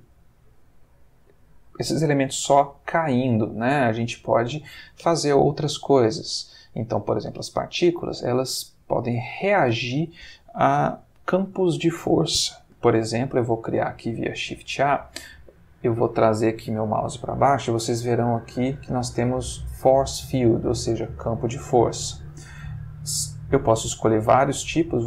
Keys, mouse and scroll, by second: 1.2-2.3 drag, 3.5 click, 6.1 Escape, 7.1 ctrl+click, 12.9 shift+a.